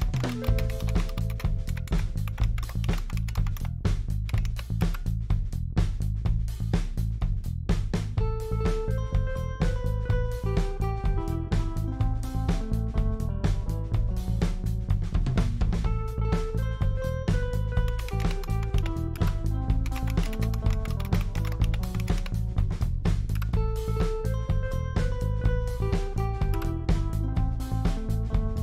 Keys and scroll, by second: 0.0-4.9 typing, 7.9-8.5 scroll up 1, 8.5-9.9 scroll up 1, 9.9-10.6 scroll up 1, 10.6-11.3 scroll up 1, 11.3-14.9 scroll up 2, 14.9-16.3 scroll up 1, 16.3-17.2 scroll down 1, 17.8-24.0 typing, 26.5 Return.